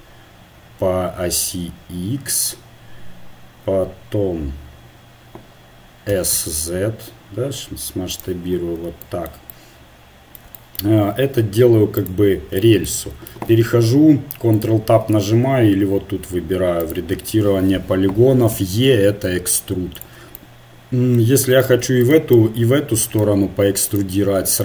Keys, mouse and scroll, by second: 6.1 s, 8.9-12.0 middle drag, 12.0-13.3 drag, 13.3 ctrl+Tab, 16.9-18.6 right drag, 18.6 e, 21.6 click, 21.7 right click, 22.1-24.6 middle drag.